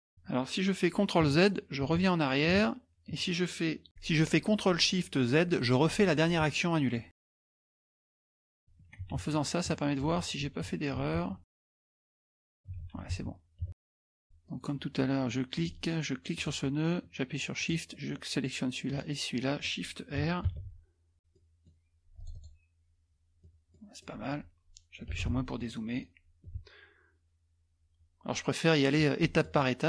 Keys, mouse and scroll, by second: 1.9 ctrl+z, 6.2 ctrl+shift+w, 8.5 ctrl+shift+w, 8.7 ctrl+z, 9.2 ctrl+shift+w, 9.7 ctrl+z, 10.2 ctrl+shift+w, 10.7 ctrl+z, 11.2 ctrl+shift+w, 11.5 ctrl+z, 11.8 ctrl+shift+w, 12.0 ctrl+z, 12.5 ctrl+z, 12.8 ctrl+shift+w, 14.2-15.0 scroll up 2, 15.5 click, 16.4 click, 17.6 shift+click, 18.9 shift+click, 20.5 shift+r, 21.3 middle click, 21.3 scroll down 2, 21.4 scroll up 1, 21.4 middle click, 21.4 scroll down 2, 21.6 scroll up 1, 21.6 scroll down 2, 21.6-22.1 scroll up 1, 22.2 click, 23.4 middle click, 23.4-23.9 scroll down 1, 23.9 scroll up 1, 24.0 middle click, 24.0 scroll down 1, 24.1 scroll up 1, 24.3 middle click, 25.1 KP_Subtract, 25.2 KP_Subtract, 25.6 middle click, 26.5 KP_Multiply, 28.9 click, 29.2 middle click, 29.3 scroll up 1.